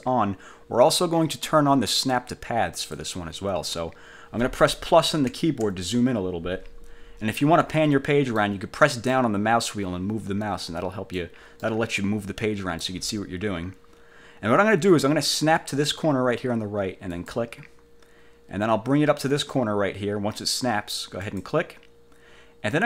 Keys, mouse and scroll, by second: 2.9 click, 5.4 =, 7.5-8.8 drag, 9.3-11.5 drag, 11.8-13.2 drag, 17.3 click, 21.4 click.